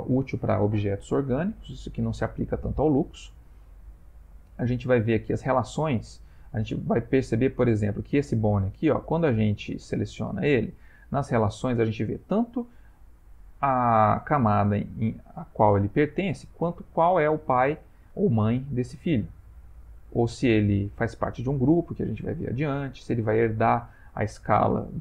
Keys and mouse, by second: 5.0 click, 7.9 click.